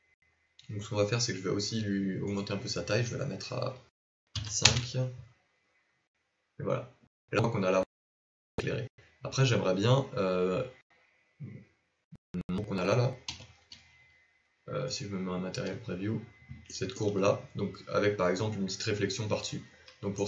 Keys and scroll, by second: 15.1 z.